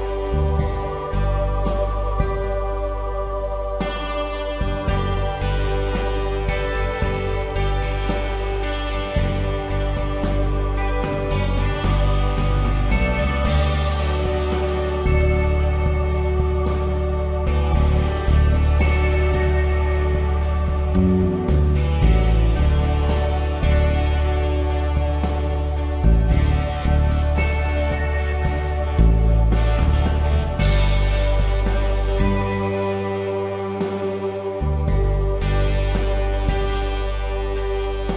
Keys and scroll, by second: 9.4-11.0 typing, 12.5-13.2 typing, 26.8 ctrl+t, 30.6 Return, 33.3 v, 34.0 Down.